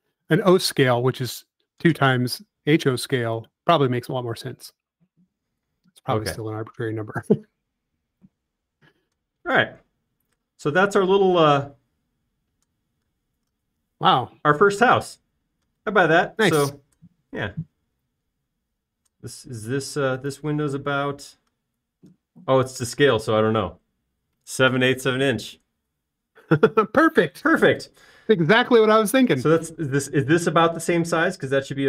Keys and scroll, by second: 5.9-6.8 typing, 20.3 |, 25.5 space, 30.2 l.